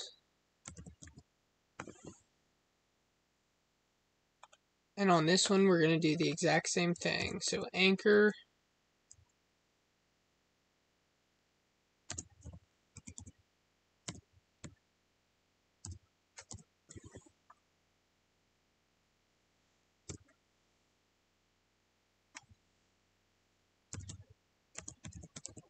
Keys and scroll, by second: 12.0 space, 24.6 space.